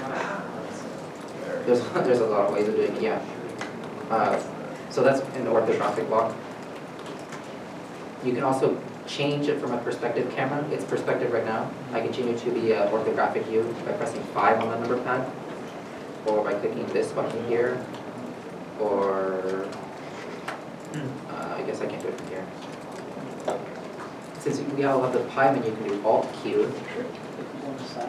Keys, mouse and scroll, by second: 4.4 middle click, 4.6-5.2 scroll down 1, 9.2-9.6 scroll down 1, 9.6-9.9 scroll, 10.1 scroll up 1, 12.3 scroll down 1, 12.5 shift+middle click, 14.9 KP_5, 15.9 shift+middle click, 18.9 shift+q, 22.3 click, 23.4 middle click, 26.0 middle click, 26.4 alt+q, 27.4 alt+click.